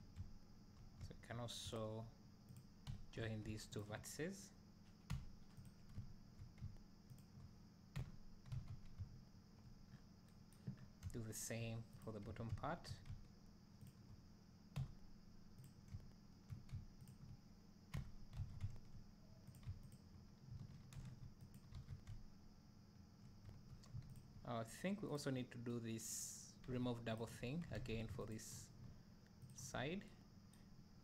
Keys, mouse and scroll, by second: 2.6 click, 3.8 shift+click, 5.2 j, 5.7 click, 7.2 shift+click, 8.0 j, 8.7 alt+a, 9.9-10.3 scroll down 1, 10.8 scroll up 1, 12.0 click, 13.9 shift+click, 14.8 j, 15.7 drag, 17.1 shift+click, 18.0 j, 18.5 alt+a, 19.6 click, 19.9 shift+click, 21.8 alt+a, 24.2 alt+click, 25.2 click, 27.8 ctrl+z.